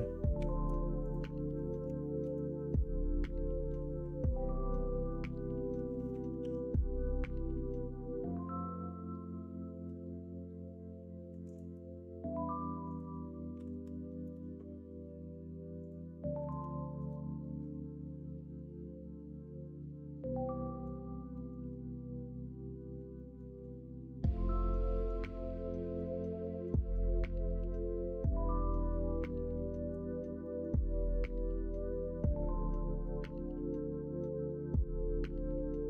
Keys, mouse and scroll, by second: 0.3 2, 2.2 ctrl+b, 25.6 middle click, 26.4 middle click, 27.5 l, 30.4 scroll up 1, 30.6 middle click, 30.6 scroll down 1, 31.9-33.0 scroll up 1, 33.0 scroll down 1.